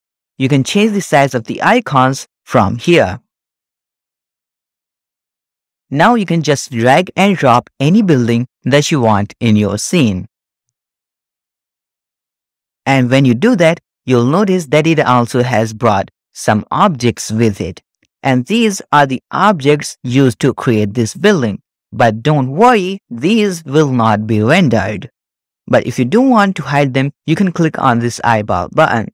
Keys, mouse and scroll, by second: 2.8-5.3 drag, 9.0 click, 11.3-12.5 middle drag, 12.5-13.6 scroll down 5, 13.0-14.2 shift+middle drag, 13.0-13.6 scroll up 1, 14.6 click, 18.3-18.8 drag, 23.1-23.8 shift+middle drag, 24.9 middle click, 28.7 click.